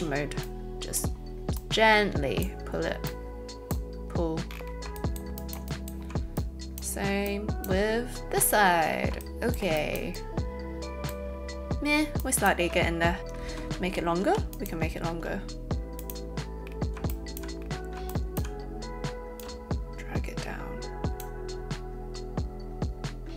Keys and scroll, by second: 13.4 space, 14.1 z.